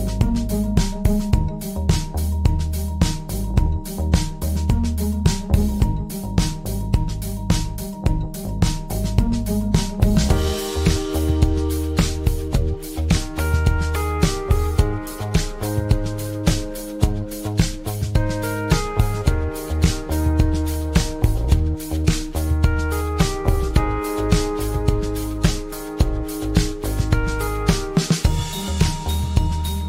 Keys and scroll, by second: 5.1 Delete.